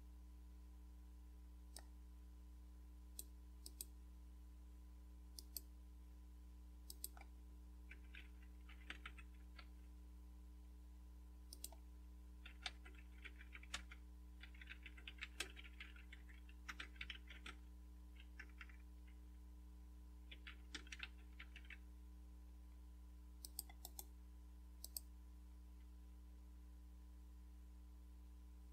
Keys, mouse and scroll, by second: 1.8-3.2 drag, 3.7 click, 5.4 click, 6.9 click, 8.1-10.1 typing, 11.5 click, 12.2-22.0 typing, 23.4-24.5 drag, 24.0 right click, 24.9 click.